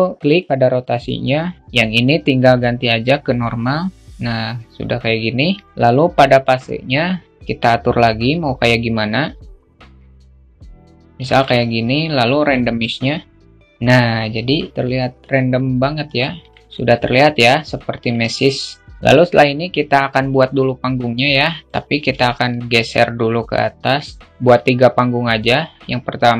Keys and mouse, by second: 0.0 click, 1.4-3.0 drag, 6.4-10.8 drag, 11.9-15.7 drag, 16.0 alt+middle click, 16.9-17.6 alt+middle drag, 18.0-18.8 alt+middle drag, 20.4-22.8 drag, 22.8-23.9 drag, 24.2 shift+a.